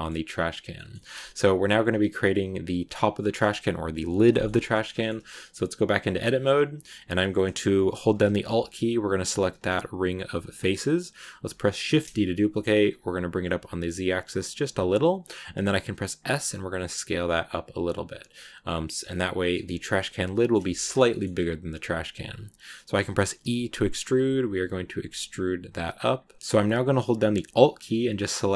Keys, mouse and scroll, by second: 0.2-0.6 scroll down 1, 0.6-1.8 middle drag, 1.8-4.0 scroll up 2, 4.2 middle click, 4.7 shift+scroll down 1, 4.7 shift+middle click, 5.2 Tab, 9.1 alt+right click, 10.7-11.8 scroll up 1, 11.8 shift+d, 18.8 scroll up 1, 18.9 scroll down 1, 19.0 middle click, 19.5 scroll down 2, 19.8 middle click, 20.8 scroll up 2, 21.0-23.3 middle drag, 23.3 e, 28.1 alt+right click.